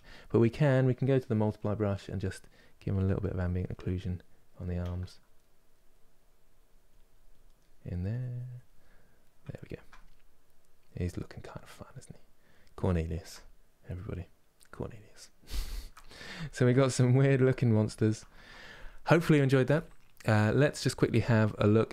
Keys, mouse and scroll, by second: 1.9 middle click, 2.4 click, 3.3-5.8 middle drag, 5.8-7.2 drag, 7.2 middle click, 7.7 click, 8.5-12.6 middle drag, 13.0-21.9 middle drag.